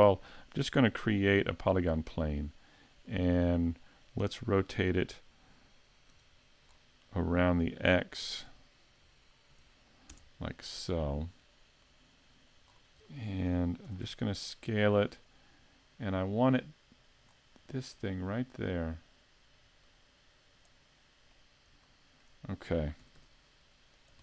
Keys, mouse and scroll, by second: 1.0 shift+a, 3.1 middle click, 6.1 KP_Decimal, 6.7-8.0 scroll down 3, 8.2 r, 11.8 click, 12.7 scroll down 3, 13.1 middle click, 13.9 s, 15.9 click, 17.3-17.7 scroll up 2, 17.7 middle click, 19.8 click, 21.0 middle click, 21.9 shift+middle click, 23.0 s.